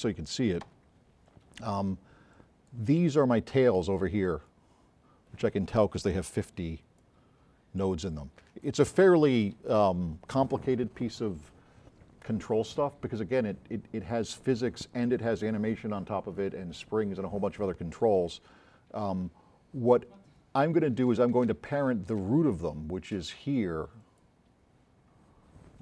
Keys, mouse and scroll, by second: 0.7 9, 2.4 click, 4.9-5.6 scroll up 6, 6.5 s, 7.4-7.9 scroll up 4, 24.1 click.